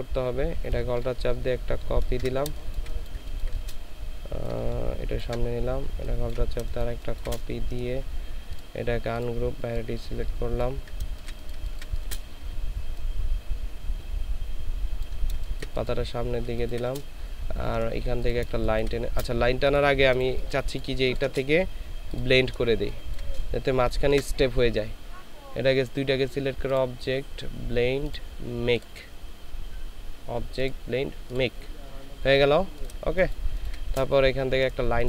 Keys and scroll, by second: 2.5 ctrl+alt+shift+space, 3.2 ctrl+alt+shift+space, 6.7 ctrl+alt+shift+space, 6.7 ctrl+alt+shift+c, 11.1 ctrl+space, 15.4 ctrl+space, 16.5 ctrl+space, 20.5 ctrl+space, 22.8 ctrl+space, 23.7 ctrl+shift+space, 33.2 ctrl+space.